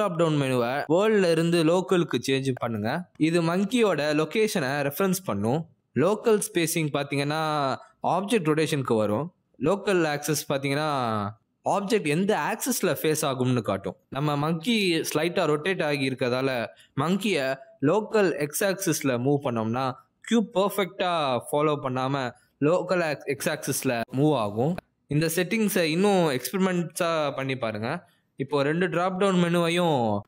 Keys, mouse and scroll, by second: 5.2 click, 8.1 click, 9.2 click, 10.1 click, 11.9 middle click, 12.7 click, 13.5 middle click, 14.2 g, 15.3 middle click, 15.7 click, 16.2 middle click, 16.4 r, 16.9 middle click, 17.4 g, 20.0 r, 20.9 middle click, 22.2 g, 23.6 g, 26.4 click.